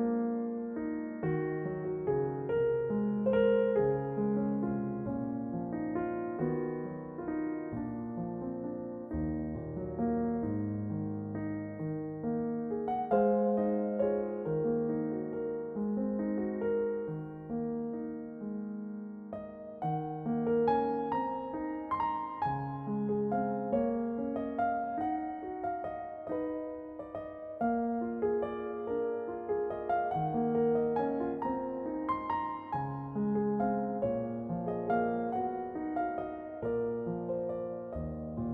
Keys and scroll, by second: 5.9 ctrl+a, 18.6 shift+a, 23.6 r, 25.0 s, 26.5 s, 29.8 s, 31.6 s.